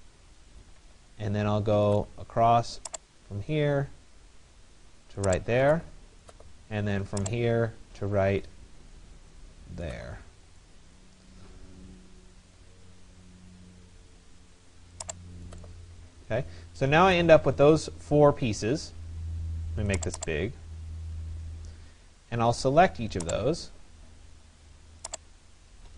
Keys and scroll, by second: 0.5 Return.